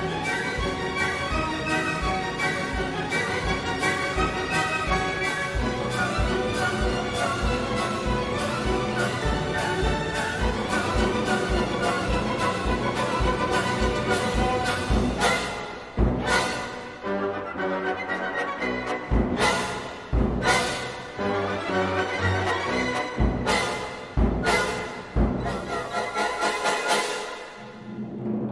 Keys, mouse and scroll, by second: 5.7 click, 6.5 click, 7.3-8.7 drag, 8.9 scroll down 1, 9.4 scroll up 1, 10.2 scroll down 1, 10.7-17.9 drag, 18.1 scroll down 1, 18.6 scroll up 1, 20.4 click, 21.7 click, 25.5 click.